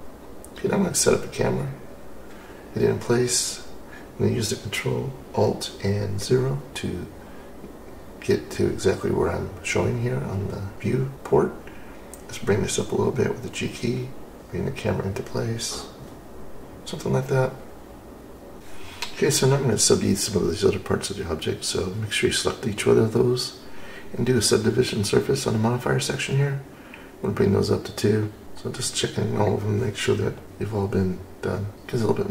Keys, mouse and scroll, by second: 0.0-2.0 drag, 10.0 ctrl+alt+KP_0, 11.5 g, 11.8 y, 14.2 click, 14.8 g, 18.6 click, 21.0-25.2 drag, 27.2 click, 30.9 click, 31.8 click.